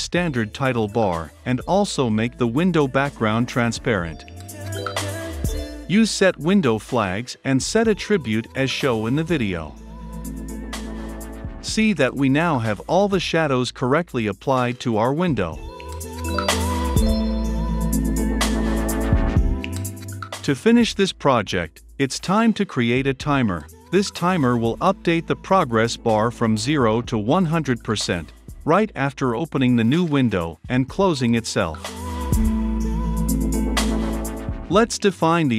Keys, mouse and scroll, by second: 0.9 click, 1.9 click, 2.4 Return, 2.7-10.8 typing, 10.9 click, 11.2 ctrl+F5, 11.9-17.7 drag, 17.7 right click, 18.5 click, 20.0 click, 20.5 click, 20.7 Return, 21.7 shift+3, 23.9-27.1 drag, 27.1 space, 28.5-33.1 typing, 29.5 click, 29.7 Return, 33.6-34.9 drag, 34.9 Return, 35.0-35.5 typing.